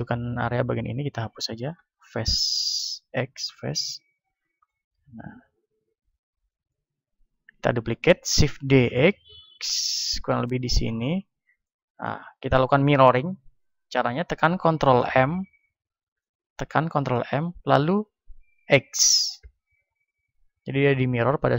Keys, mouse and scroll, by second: 1.6 x, 3.4-6.4 middle drag, 4.0 Tab, 5.8 KP_1, 8.4 shift+d, 11.0-16.2 drag, 16.2 ctrl+m.